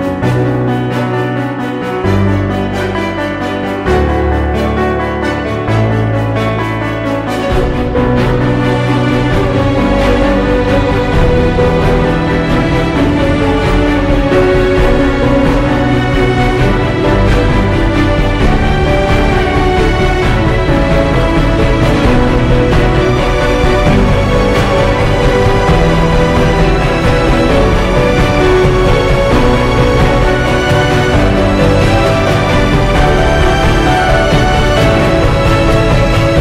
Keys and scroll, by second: 0.0-1.3 typing, 1.8 ctrl+j, 4.3 5, 4.9 ctrl+j, 5.9-8.6 typing, 6.8 ctrl+j, 8.9 ctrl+j, 9.9-12.5 typing, 10.8 ctrl+j, 13.5 ctrl+j, 14.4 ctrl+h, 15.5 Up, 15.8 Down, 16.0 Up, 16.2 Down, 18.7 ctrl+h, 22.7 ctrl+g, 23.2-24.1 typing, 24.5 ctrl+s, 24.9 ctrl+0, 36.3 ctrl+i.